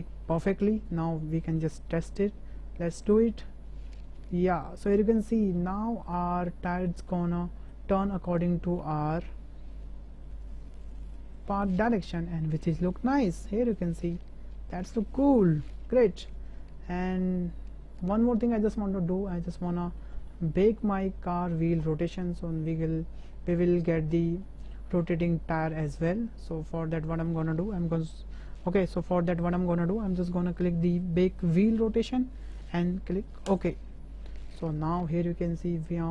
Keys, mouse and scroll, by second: 1.3 shift+middle click, 2.9-4.8 drag, 5.5-6.0 shift+drag, 6.3-6.8 drag, 7.1-7.7 drag, 7.1-7.7 right drag, 8.0-10.9 drag, 8.0-9.0 right drag, 10.0-10.9 right drag, 10.9-11.6 middle drag, 12.6-18.0 drag, 18.3-18.7 shift+middle drag, 19.3 middle drag, 19.7 shift+middle drag, 20.1 middle click, 20.5-20.8 shift+drag, 21.4 shift+drag, 22.2 shift+b, 23.0 shift+drag, 23.8-24.1 drag, 24.1-24.6 shift+middle drag, 25.2-25.8 shift+middle drag, 26.8-27.2 middle drag, 31.6-34.0 drag, 35.5-36.1 drag.